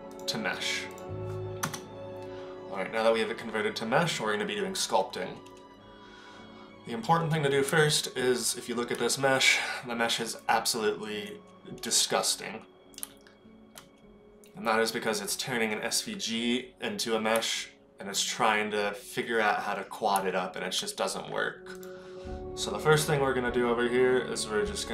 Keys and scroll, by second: 1.7 KP_0, 7.7 Tab, 13.0 Tab, 17.3 Tab, 20.2 Tab.